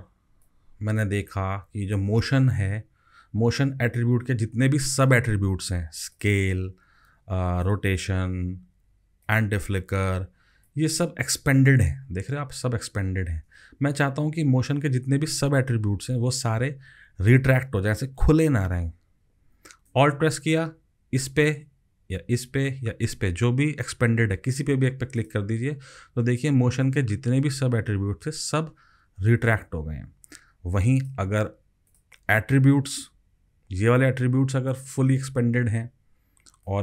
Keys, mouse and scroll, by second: 25.2 alt+click.